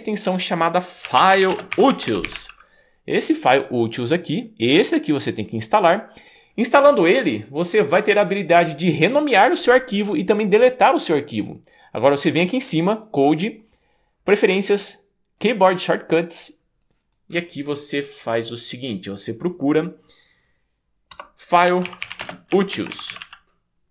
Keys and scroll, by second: 0.8-2.9 typing, 21.2-23.7 typing.